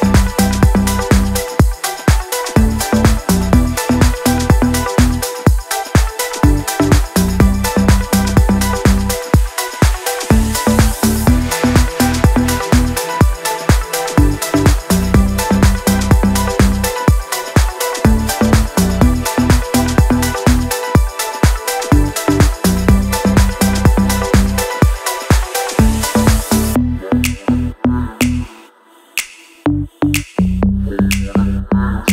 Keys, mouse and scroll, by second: 0.0-2.6 typing, 3.1 Return, 4.3-6.1 typing, 7.4 click, 13.5 shift+right click, 14.8 ctrl+a, 16.3-17.9 typing, 19.1-25.7 typing, 27.1 click, 28.8 t, 29.1 click, 31.1 click, 31.6 Right.